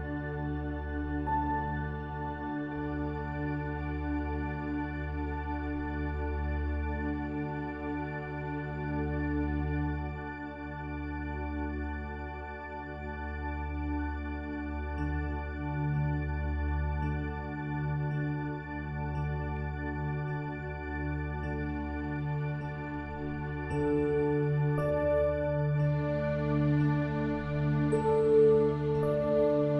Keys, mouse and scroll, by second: 6.1 middle click, 6.8 Tab, 8.0-10.0 drag, 11.5 s, 13.7-15.6 drag, 16.0-18.0 middle drag, 18.0 Tab, 19.4-21.3 drag, 21.5-22.6 drag, 26.2-29.7 drag.